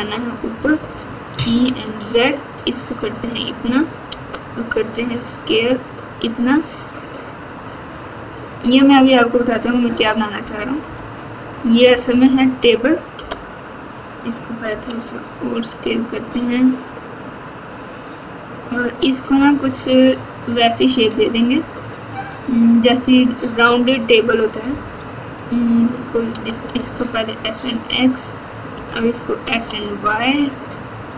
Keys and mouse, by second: 0.7 e, 4.0 s, 10.8 KP_8, 11.8 KP_4, 12.0 KP_4, 13.1 KP_7, 14.6 s, 26.2 s, 28.7 s.